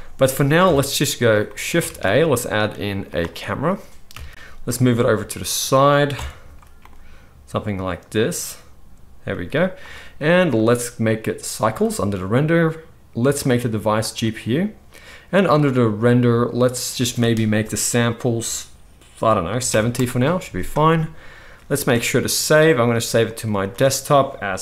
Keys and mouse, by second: 0.6 KP_1, 1.8 shift+a, 4.1 KP_3, 4.6 g, 5.5-10.5 drag, 6.1 KP_0, 6.7 g, 9.2 g, 10.6-11.0 drag, 21.7 ctrl+s.